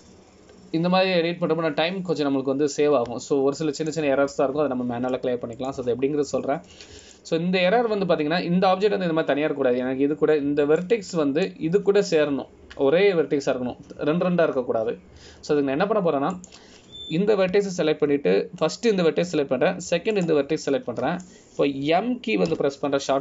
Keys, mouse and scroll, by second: 5.9 shift+click, 7.7 click, 9.2 click, 12.9 click, 18.5 click, 22.3 shift+click.